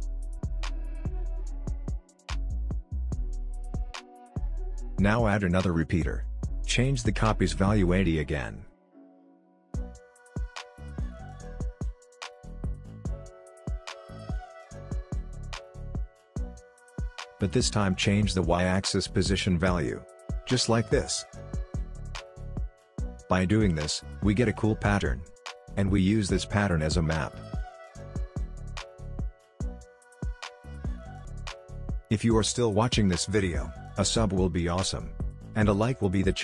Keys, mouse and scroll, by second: 0.4-2.0 alt+scroll down 2, 3.4-11.5 drag, 13.3 Return, 14.8 click, 17.2 click, 18.1 ctrl+z, 18.6-26.9 drag, 26.9-28.6 scroll up 1, 28.6-30.0 scroll down 1, 30.0-31.8 drag.